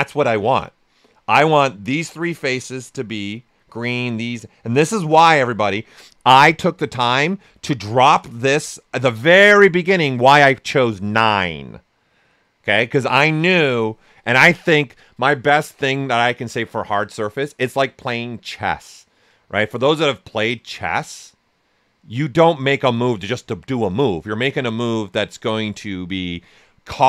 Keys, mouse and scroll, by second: 1.9 typing, 2.7 right click, 5.1 alt+shift+right click.